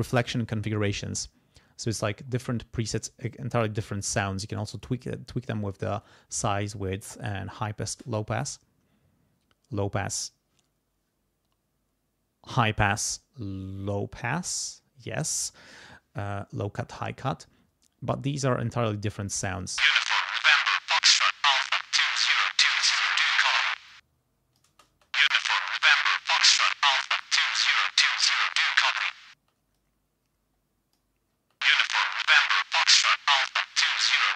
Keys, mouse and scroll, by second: 19.5 space, 21.0-22.2 drag, 22.6 click, 23.9 click, 24.7 space, 26.0 click, 26.9 click, 29.3 space, 29.7-31.1 drag, 31.3 space, 31.9-33.5 drag, 34.0 click.